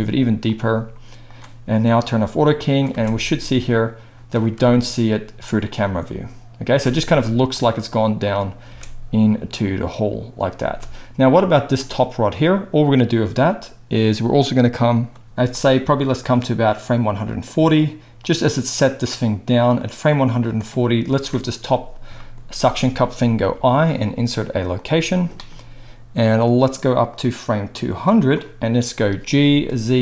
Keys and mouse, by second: 2.0-11.6 drag, 2.8 space, 6.7 space, 8.6 space, 10.5 space, 11.6-16.2 middle drag, 16.2-30.0 drag, 29.3 g.